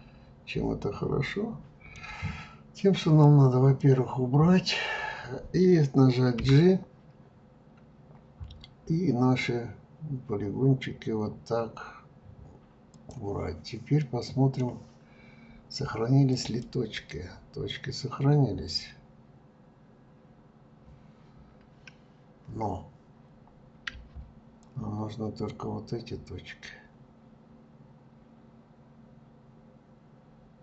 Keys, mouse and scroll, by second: 3.2 click, 13.9-16.3 middle drag, 16.3 click, 24.6-27.7 ctrl+drag.